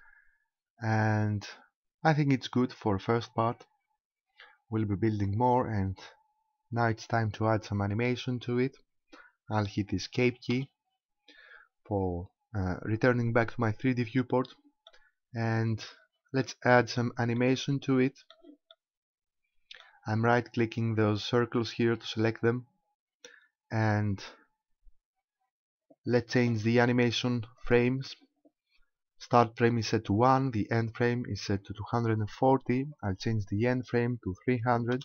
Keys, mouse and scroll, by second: 10.5 Escape, 14.2 middle click, 15.4-16.2 scroll down 8, 16.4 middle click, 17.4 middle click, 18.7 middle click, 20.9 right click, 23.5-25.0 scroll down 1, 27.6 click, 33.8 click.